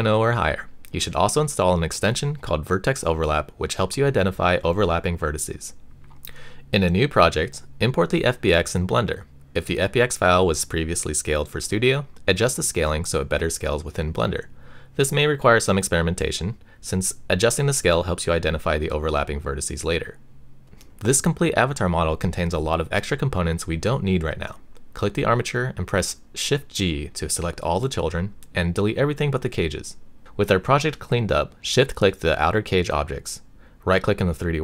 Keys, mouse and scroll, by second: 7.4 a, 7.7 x, 9.4-11.6 drag, 23.1 click, 24.2 click, 24.8 click, 25.9 shift+g, 27.1 x, 29.7 click, 30.6 click, 31.1 x, 32.2 click, 32.6 a, 33.0-34.6 right drag.